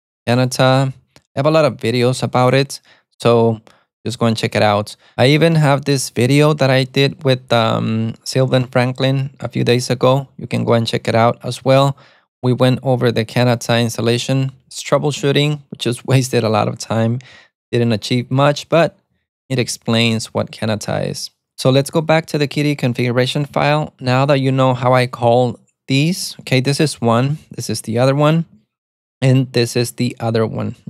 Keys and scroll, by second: 0.0-0.3 typing, 15.3-17.6 typing, 19.4-20.8 typing, 23.5 space, 23.6 BackSpace, 26.2-27.4 typing, 28.5 typing, 29.8 typing.